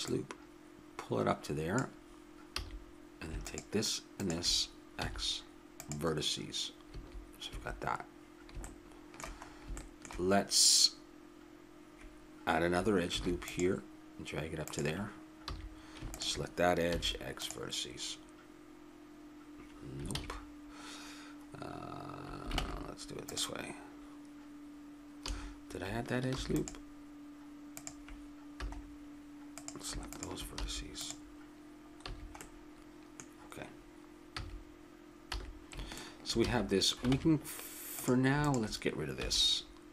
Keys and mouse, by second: 2.5 a, 3.4-5.3 right drag, 5.0 x, 6.9 a, 7.5 a, 8.7-9.9 middle drag, 10.9 middle click, 13.1 ctrl+r, 15.4 a, 16.1-18.6 drag, 16.9 x, 20.1 ctrl+z, 22.6 ctrl+Tab, 25.2 a, 26.3 ctrl+r, 28.6 a, 29.6-31.8 drag, 30.6 x, 32.1 a, 32.4 click, 32.6 middle click, 34.4 a, 35.3 a, 36.4 a, 37.1 ctrl+Tab, 38.4-39.8 drag, 39.2 x.